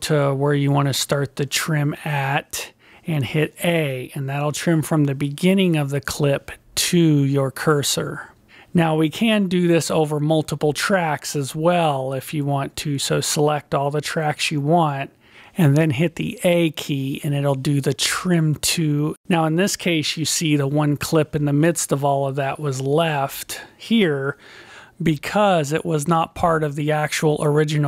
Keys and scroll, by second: 6.1 a, 15.9 a.